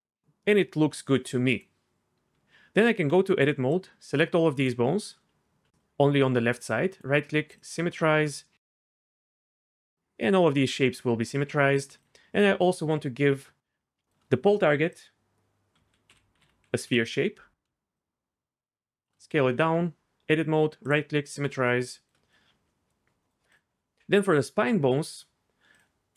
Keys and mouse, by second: 2.3 Tab, 3.7 click, 5.8 ctrl+click, 7.6 right click, 8.8 Tab, 15.0-16.9 drag, 18.0-19.0 shift+drag, 19.5 Tab, 20.3 click, 21.3 Tab, 22.2 middle click, 25.8 click.